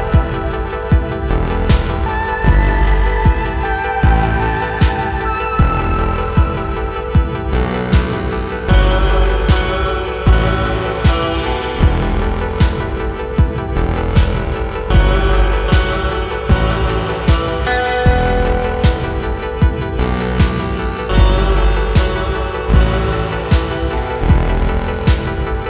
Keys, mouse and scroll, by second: 0.8 alt+middle click, 1.5-3.7 drag, 4.0 alt+middle click, 4.6 click, 5.6 click, 6.3 click, 6.9 click, 7.7 alt+middle click, 8.6-9.9 drag, 10.5-11.8 drag, 12.0 click, 13.1-15.3 drag, 15.6 alt+middle click, 16.2-18.3 drag, 18.5-18.9 scroll up 3, 19.4-19.8 scroll down 3, 20.0 click, 21.0-21.7 alt+scroll up 5, 21.9 alt+click, 22.3 alt+click, 22.6 alt+click, 23.2-23.5 scroll down 7, 23.9 shift+right click, 24.6-25.3 scroll down 5, 24.8 alt+middle click, 25.4 alt+click.